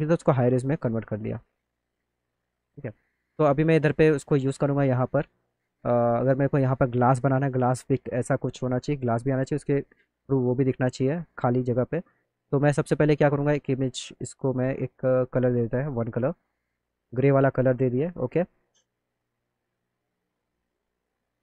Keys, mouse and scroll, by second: 0.6 middle click, 0.8 middle click, 1.6 middle click, 1.8 middle click, 2.6 click, 5.2 alt+middle click, 8.7 alt+middle click, 14.1 click, 15.6 click, 16.8 alt+middle click, 18.0 alt+middle click, 19.2 click.